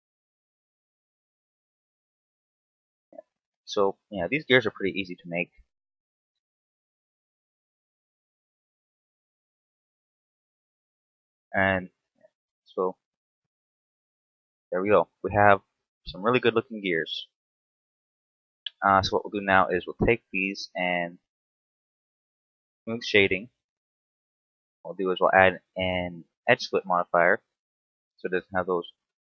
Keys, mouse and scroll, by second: 0.3 middle click, 1.2 right click, 1.8 shift+right click, 2.2 right click, 3.2 shift+right click, 3.5 shift+right click, 3.9 shift+right click, 4.6 space, 6.3 space, 6.5 right click, 8.1 alt+right click, 8.9 alt+shift+right click, 9.2 middle click, 10.2 f, 10.3 middle click, 11.7 alt+right click, 12.7 alt+shift+right click, 13.4 f, 13.6 scroll down 4, 13.9 Tab, 14.6 KP_7, 15.3-15.6 scroll down 2, 15.7 shift+middle click, 16.0 scroll up 1, 17.3 scroll up 1, 18.1 t, 19.3 right click, 21.2 click, 22.5 click, 24.1 click, 25.0 click, 27.7 right click, 28.7 click.